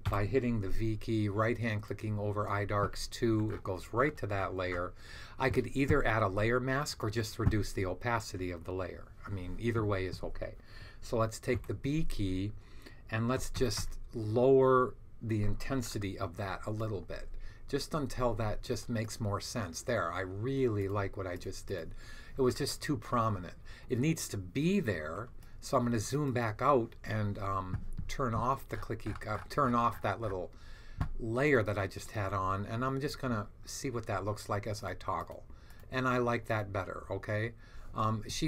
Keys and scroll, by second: 0.0 v, 11.4 b, 13.0-14.1 typing.